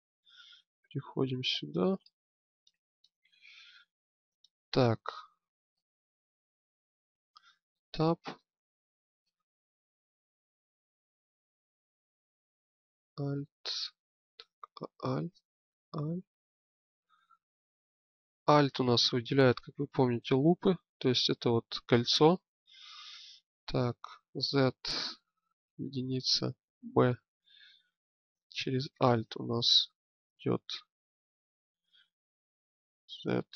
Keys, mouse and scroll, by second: 1.9-3.6 middle drag, 7.4 Tab, 12.6-14.0 middle drag, 14.7-20.9 middle drag, 24.1 z, 25.6 KP_1, 26.5 b, 32.9 z.